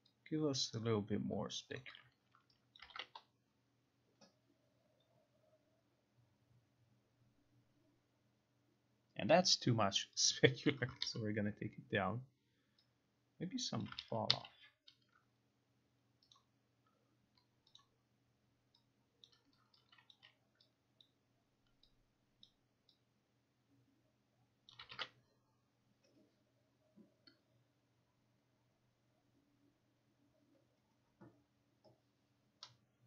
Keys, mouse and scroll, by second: 1.8 click, 2.8 click, 3.0 ctrl+r, 10.6 click, 11.1 ctrl+z, 13.9 click, 14.0 ctrl+z, 14.4 ctrl+z, 16.5 click, 17.9 click, 19.4 click, 20.2 click, 21.1 click, 22.6 click, 24.8 click.